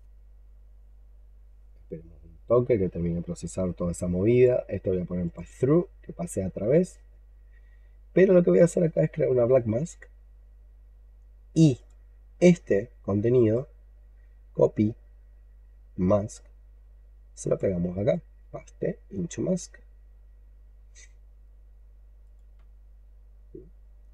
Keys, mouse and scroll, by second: 5.8-8.3 scroll up 2, 8.4 right click, 13.2 right click, 17.8 right click.